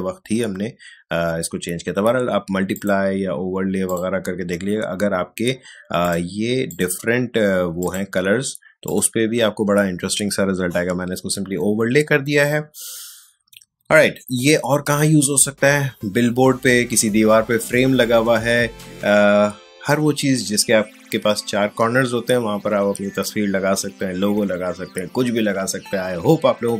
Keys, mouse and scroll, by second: 2.7 click.